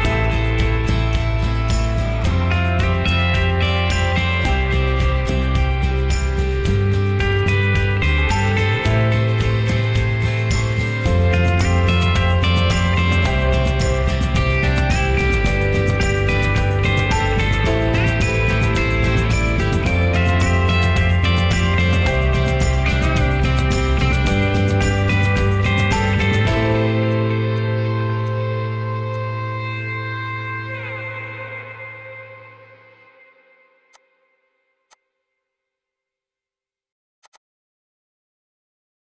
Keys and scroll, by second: 0.0 ctrl+a, 3.2 Escape, 11.0 Escape, 11.2 Escape, 11.3 Escape, 11.4 Escape, 12.4 ctrl+h, 20.0 ctrl+a, 30.6 ctrl+g, 31.0 ctrl+h, 33.7 h, 34.6 ctrl+h, 35.5 ctrl+s.